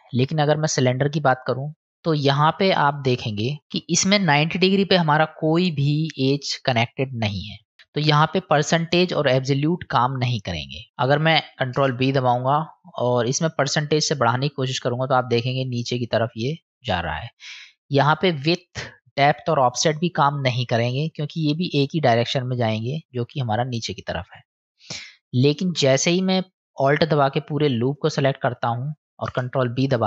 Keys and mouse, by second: 2.2 middle click, 3.7 middle click, 11.6 ctrl+b, 14.2-17.5 drag, 18.7-20.0 drag, 20.9-24.5 drag, 29.1 ctrl+b.